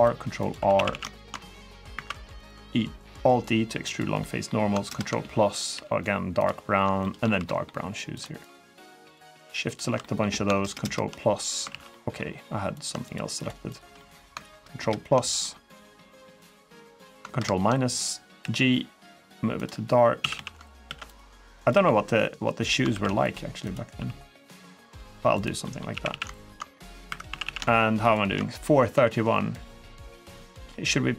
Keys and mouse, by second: 0.2 click, 0.3 3, 0.5 a, 0.7 a, 1.0 alt+shift+click, 1.2 middle click, 1.7 alt+e, 3.6 click, 3.9 middle click, 4.6 ctrl+KP_Add, 5.5 g, 6.1 click, 6.8 shift+middle click, 7.1 3, 7.2 middle click, 8.0 shift+click, 8.8 shift+click, 9.1 shift+click, 9.4 shift+click, 9.8 middle click, 10.4 ctrl+KP_Add, 11.3 ctrl+KP_Add, 11.5 ctrl+z, 11.7 middle click, 12.8 shift+click, 13.1 shift+click, 13.5 shift+click, 13.7 click, 14.3 ctrl+KP_Add, 14.8 ctrl+KP_Add, 15.2 middle click, 15.8 middle click, 17.1 ctrl+KP_Subtract, 18.2 g, 19.4 click, 20.0 a, 20.1 a, 20.6 ctrl+r, 21.3 click, 21.6 s, 22.4 click, 22.7 ctrl+r, 23.4 click, 23.7 s, 25.4 middle click, 25.8-27.2 typing, 26.1 alt+shift+click, 27.8 alt+shift+click, 28.7 g, 29.3 click, 30.3 middle click.